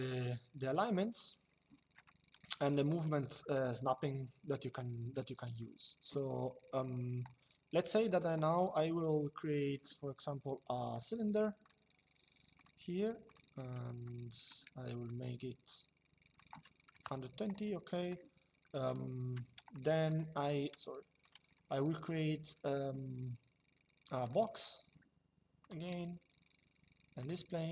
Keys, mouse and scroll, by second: 0.9 click, 1.7 shift+middle click, 2.9 middle click, 7.8 click, 9.1 click, 10.6 click, 13.8 shift+middle click, 14.8 click, 16.6 KP_Enter, 18.6 click, 19.8 click, 20.5 Escape, 20.9 click, 24.0 click, 25.3 click, 26.9 click.